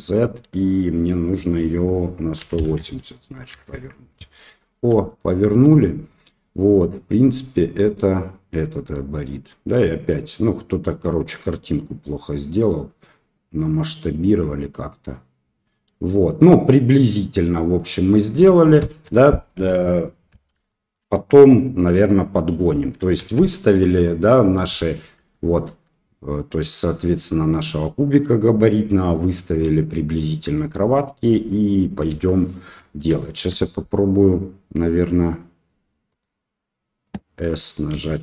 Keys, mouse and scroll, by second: 5.1 shift+click, 5.4 shift+middle click, 6.6-16.5 right drag, 16.5-17.7 drag, 18.8 KP_1, 20.7 shift+middle drag, 23.1 KP_3, 25.4 shift+drag, 32.1 KP_1, 33.1-33.4 shift+drag, 36.1 click, 37.9 s.